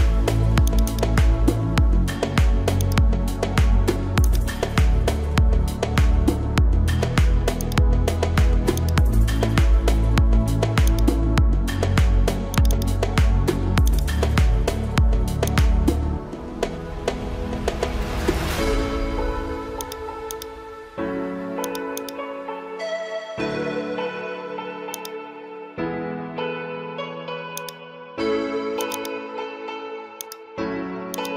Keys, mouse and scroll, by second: 2.8 alt+click, 4.2-7.3 drag, 13.9 alt+click, 15.5-31.0 drag, 31.1-31.3 drag.